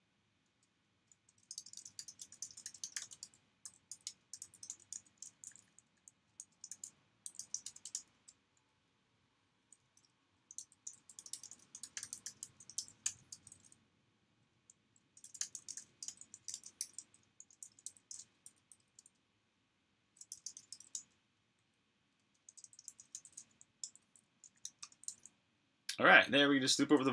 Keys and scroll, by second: 1.4-2.6 typing, 5.7 typing, 9.7-13.1 typing, 15.0-18.3 typing, 19.8-21.3 typing, 22.3-25.4 typing, 26.9 k.